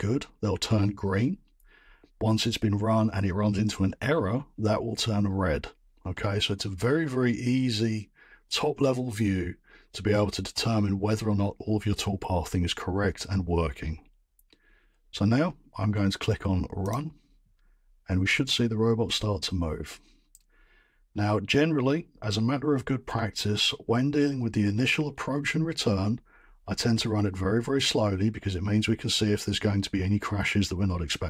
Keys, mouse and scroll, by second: 16.9-20.7 middle drag, 20.7-21.3 drag, 21.9 middle click.